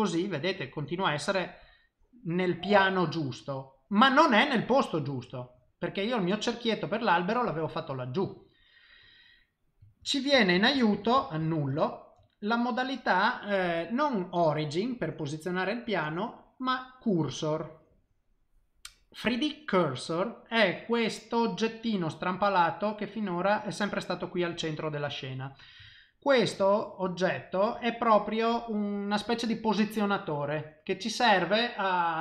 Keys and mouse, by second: 0.0 middle click, 0.5 click, 1.0 middle click, 2.3 middle click, 2.7 shift+middle click, 3.2 middle click, 9.2 middle click, 10.0 ctrl+z, 10.4 ctrl+z, 10.6 ctrl+z, 10.8 ctrl+z, 10.9 ctrl+z, 11.2 ctrl+z, 11.4 ctrl+z, 11.7 ctrl+z, 12.3 middle click, 16.6 click, 21.8 middle click, 25.9 ctrl+middle click, 26.6 shift+middle click.